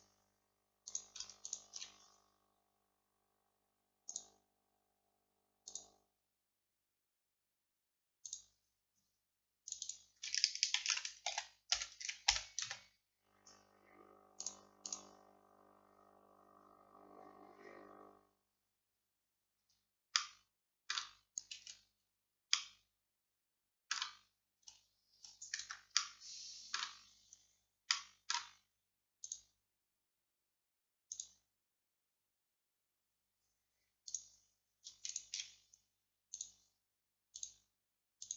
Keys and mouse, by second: 19.6 Tab, 19.6 middle click, 21.6 a, 24.7-26.0 middle drag, 24.7 a, 25.2 a, 25.7 Tab, 29.3-31.3 drag, 38.1 click.